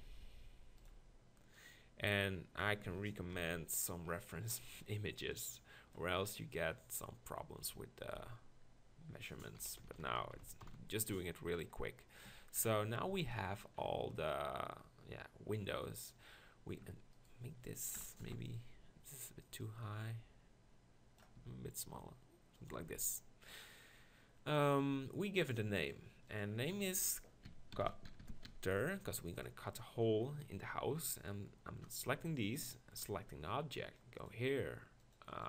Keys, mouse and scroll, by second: 1.5-2.6 drag, 3.3 ctrl+KP_Decimal, 5.3-7.8 drag, 8.2 z, 9.6 KP_1, 9.8-10.6 KP_4, 12.3 Tab, 16.8 Tab, 17.1-18.2 drag, 18.2 ctrl+l, 21.4 s, 22.7 click, 22.8 Tab, 26.6-28.2 drag, 28.2 t, 32.6-35.4 shift+drag.